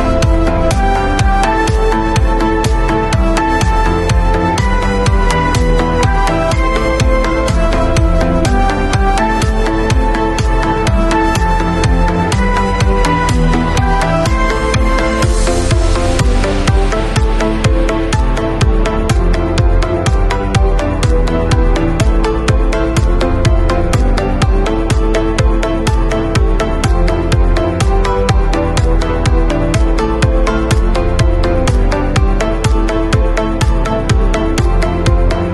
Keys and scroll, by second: 8.8 b, 30.2 5, 31.2 ].